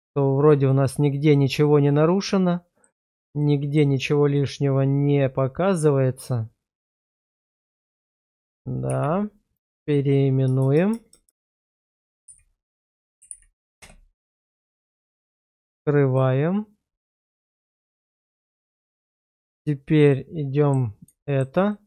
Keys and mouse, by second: 3.4-3.8 shift+middle drag, 4.3-7.5 middle drag, 7.8 click, 8.9 shift+r, 10.6 BackSpace, 10.7 BackSpace, 11.1 BackSpace, 11.4 BackSpace, 16.1 click, 17.2 shift+middle click, 17.6-18.2 middle drag, 18.4 shift+middle drag, 19.0 click, 20.1-20.7 middle drag, 21.2 shift+middle drag, 21.7-21.8 middle drag.